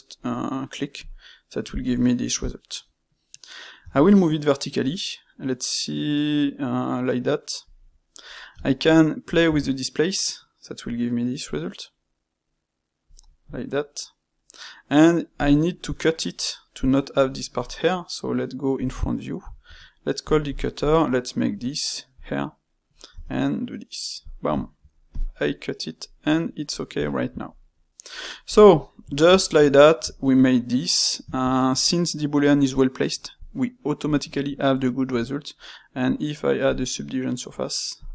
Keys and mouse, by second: 2.2-3.7 middle drag, 3.7 g, 8.5 space, 13.4-15.4 middle drag, 16.3-18.7 middle drag, 18.7 KP_1, 19.6 space, 22.3-25.1 middle drag, 25.2-28.4 middle drag, 28.4 click, 28.7-35.0 middle drag, 35.0 space.